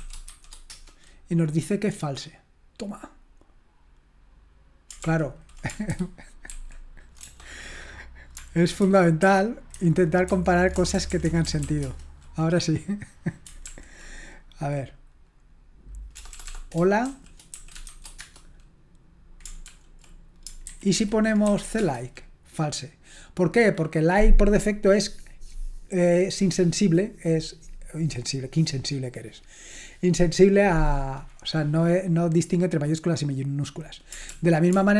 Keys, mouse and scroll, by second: 0.0-0.8 typing, 5.1 ctrl+p, 5.9 alt+g, 6.5 alt+d, 7.2 BackSpace, 8.8 alt+b, 9.2 alt+b, 9.7 alt+b, 10.3 alt+f, 10.8-11.6 typing, 11.8 Return, 13.7 ctrl+p, 16.1-18.4 typing, 19.7 ctrl+p, 20.7 alt+b, 21.0 alt+b, 21.4 c, 21.8 Return, 34.3 ctrl+p.